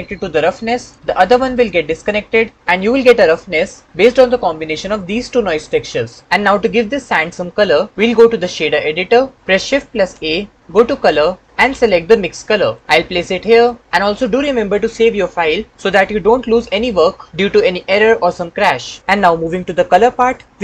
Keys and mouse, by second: 10.2 shift+a.